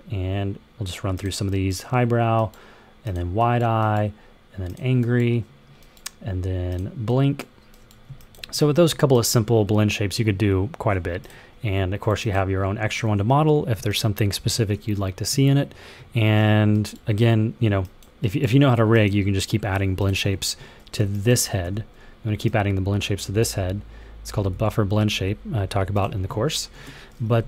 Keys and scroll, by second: 21.5 w, 24.4 super+z, 26.6 ctrl+h.